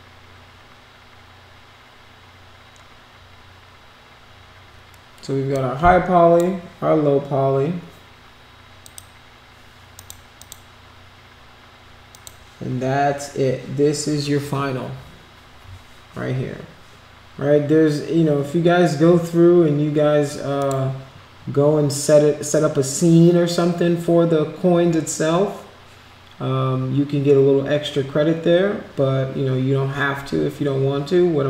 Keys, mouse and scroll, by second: 5.5 click, 8.8 click, 9.9 click, 10.3 click, 12.1 click, 20.6 click.